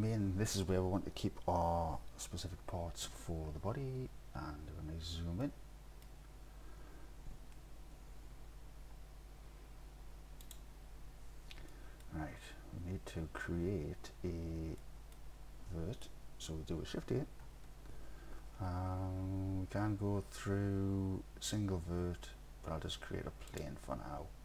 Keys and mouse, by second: 5.6 middle click, 5.7-6.1 middle drag, 8.3 n, 11.0 n, 11.7 click, 12.0 click, 14.9 middle click, 15.0 middle click, 15.0 click, 17.5 shift+a.